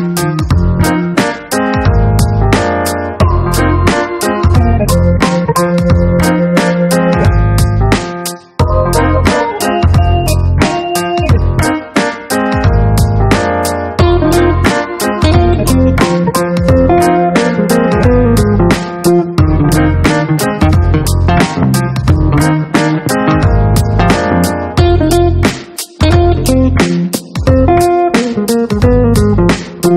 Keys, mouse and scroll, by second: 0.9 click, 2.1 click, 3.3-5.1 drag, 6.3 right click, 9.7 click, 11.8-12.3 scroll down 2, 13.3-14.1 scroll down 3, 14.4-15.1 scroll down 4, 18.1-20.3 drag, 20.5 click, 22.0-24.4 typing, 25.8 click, 27.7 click.